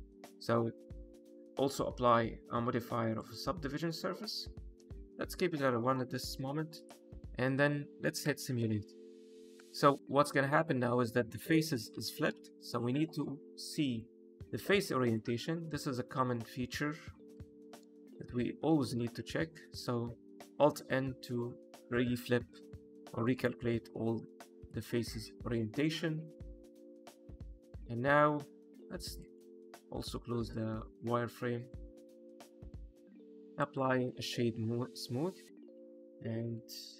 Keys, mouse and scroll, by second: 0.1 click, 1.1 click, 3.3 click, 4.7 click, 5.0-5.3 scroll up 1, 5.3 middle click, 5.8 shift+middle click, 6.3 click, 6.7 click, 8.2 space, 9.5 space, 12.4 shift+Left, 13.9 click, 15.4 middle click, 15.9 Tab, 16.3 a, 17.3 alt+n, 21.5 middle click, 24.6 click, 26.9 middle click, 27.2 Tab, 27.5 click, 27.8 middle click, 29.1 click, 30.5 click, 32.0 click, 32.4 middle click, 33.0 click, 33.2-33.5 scroll up 2, 33.5 right click, 34.4 scroll down 2, 34.9 click, 35.5 middle click, 36.4 click.